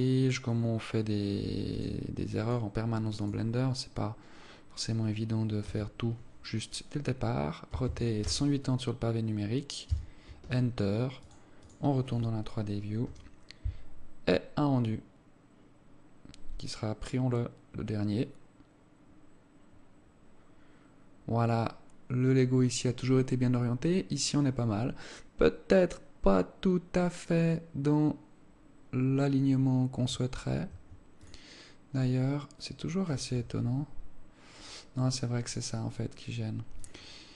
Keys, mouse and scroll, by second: 12.2 click, 31.3 Escape, 31.7 click, 33.1 Escape, 33.1 click, 36.0 click.